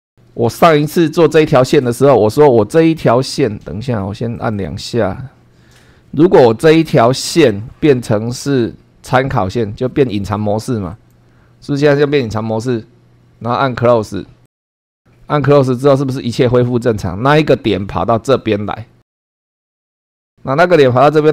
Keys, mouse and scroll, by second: 0.1 scroll down 1, 0.6 shift+middle click, 4.3 click, 6.6 click, 10.9 click, 14.4 click, 15.3-15.7 scroll up 1.